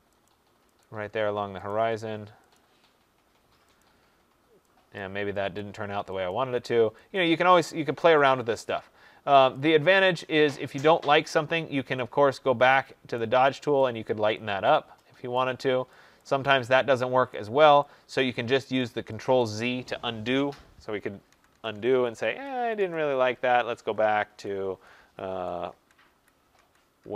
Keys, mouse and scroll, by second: 0.2 click, 0.7 click, 1.6 click, 2.5 click, 3.7 click, 4.9 click, 5.5 click, 6.2 click, 7.1 click, 8.4 click, 9.5 click, 13.1 click, 14.0 click, 14.6 click, 15.3 click, 15.9 click, 16.4 click, 17.2 click, 18.1 click, 18.7 click, 19.3 click, 21.2 ctrl+z, 21.5 ctrl+z, 21.6 ctrl+z, 21.8 ctrl+z, 22.0 ctrl+z, 22.3 ctrl+z, 22.5 ctrl+z, 22.7 ctrl+z, 22.9 ctrl+z, 23.1 ctrl+z, 23.4 ctrl+z, 23.7 ctrl+z, 24.0 ctrl+z, 24.2 ctrl+z, 24.7 ctrl+z, 24.9 ctrl+z, 25.2 ctrl+z, 25.6 ctrl+z, 26.5 ctrl+z, 26.9 ctrl+z.